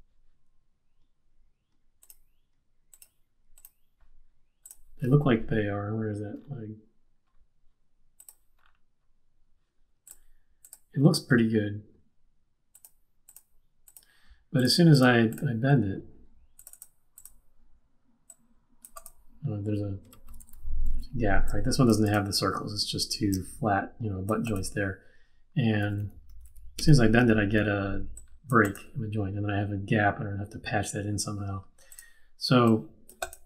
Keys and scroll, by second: 15.7 q, 20.4 super+z, 25.8 super+z, 26.6 super+z, 27.2 super+z.